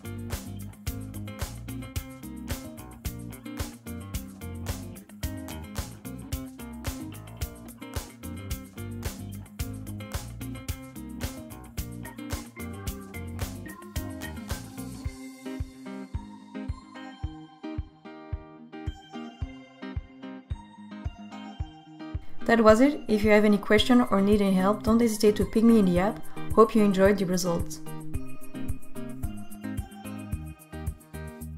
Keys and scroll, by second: 8.2 Tab, 19.1 i.